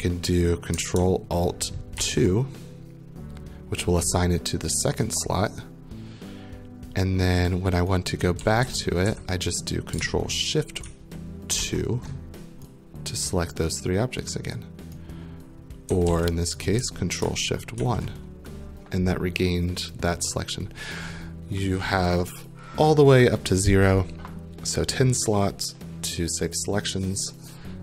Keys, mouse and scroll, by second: 2.0 ctrl+alt+2, 7.5 click, 8.1-9.6 typing, 9.6 right click, 10.8 ctrl+shift+1, 11.6 ctrl+shift+2, 14.5 right click, 15.7-16.6 typing, 16.6 right click, 17.8 ctrl+shift+1.